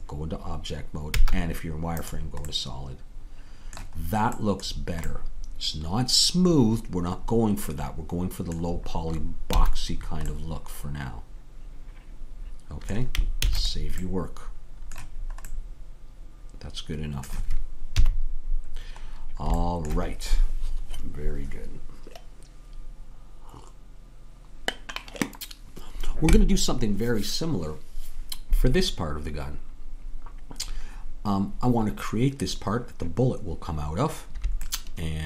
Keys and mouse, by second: 1.1 z, 6.1-7.4 middle drag, 8.7-12.8 middle drag, 9.6 a, 13.4 ctrl+s, 17.9 KP_3, 34.8-35.2 middle drag.